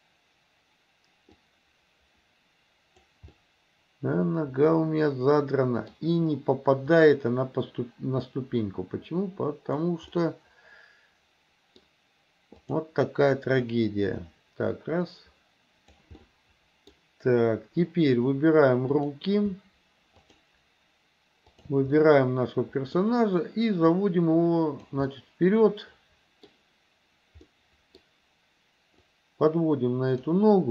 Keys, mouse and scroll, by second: 1.4-3.1 drag, 3.3-6.0 middle drag, 6.9 click, 8.4-9.9 drag, 10.2-11.9 middle drag, 12.8 click, 13.8-16.0 drag, 16.3 middle click, 19.0 click, 20.3 shift+click, 21.6 shift+click, 22.0-23.0 middle drag, 23.9-25.0 drag, 25.1 scroll up 1, 25.3-26.5 middle drag, 27.5 middle click, 29.2-30.4 drag.